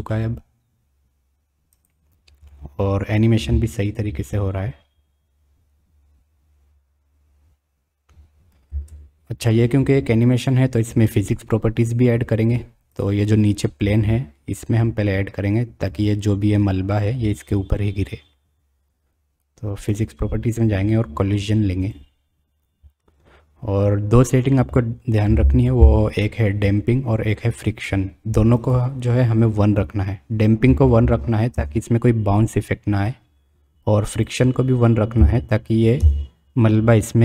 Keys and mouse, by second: 0.1 middle click, 0.3 click, 1.7-2.1 drag, 2.5 click, 3.5 space, 7.0-8.3 middle drag, 9.3 space, 12.9 click, 21.8 click, 28.6-31.8 drag, 34.3-36.4 drag.